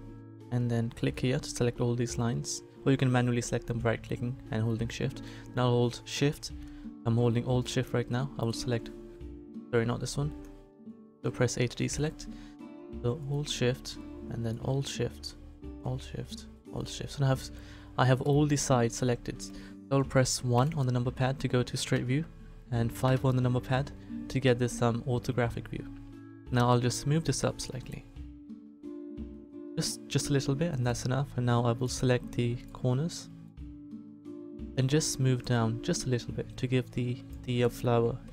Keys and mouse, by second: 1.0-10.9 drag, 10.9 a, 13.2 click, 26.9 click, 29.8 click, 37.0 click.